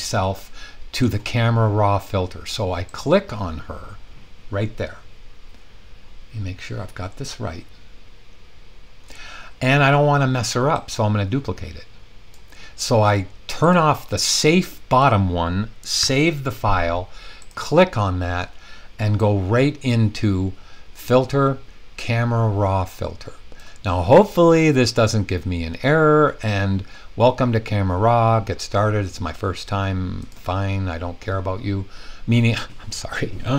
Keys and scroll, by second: 16.0 super+s.